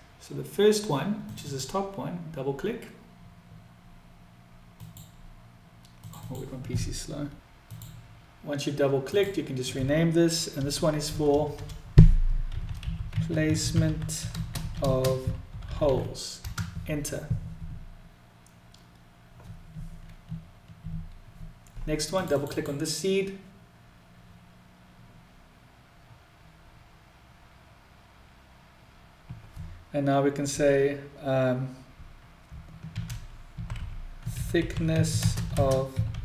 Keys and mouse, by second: 7.6-19.8 drag, 11.1 BackSpace, 12.1 s, 28.4-36.2 drag, 32.3 s, 34.9 s.